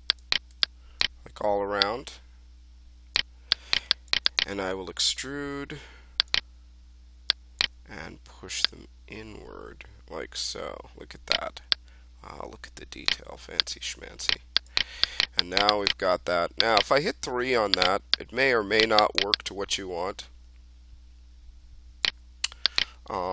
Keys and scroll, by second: 17.1 3.